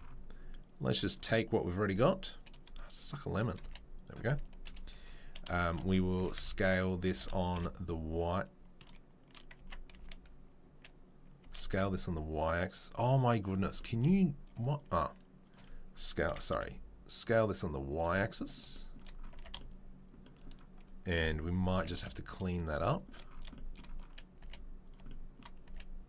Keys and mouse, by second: 1.9 g, 2.6-14.8 shift+middle drag, 3.6 g, 4.6 KP_3, 6.1 s, 7.1 s, 9.6 Tab, 9.9 a, 11.4 s, 14.8-17.9 drag, 17.9-26.0 middle drag, 21.1 KP_7, 21.7 g, 24.4 g.